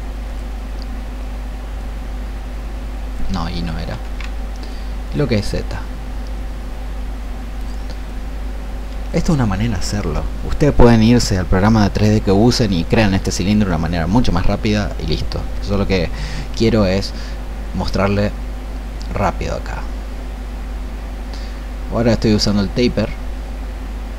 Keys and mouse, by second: 4.6-24.1 drag.